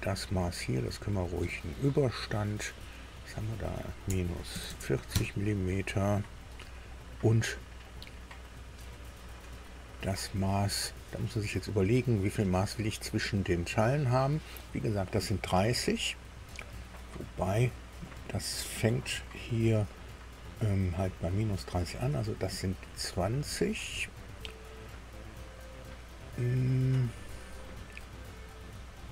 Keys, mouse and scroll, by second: 1.1 click, 2.6 click, 4.0 KP_Subtract, 4.5 KP_4, 4.7 KP_0, 5.1 KP_Enter, 9.5 click.